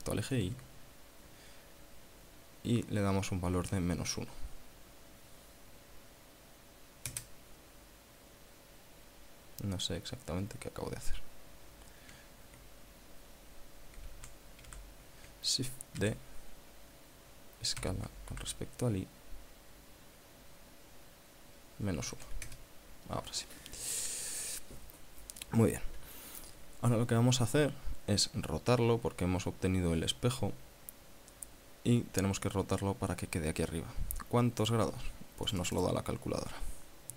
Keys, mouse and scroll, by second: 0.7 y, 3.9 KP_Subtract, 4.1 KP_1, 7.4 KP_Enter, 14.4 a, 14.9 a, 16.3 shift+d, 18.0 s, 18.6 y, 22.3 KP_Subtract, 22.5 KP_1, 22.7 KP_Enter, 35.0 click, 35.8 click.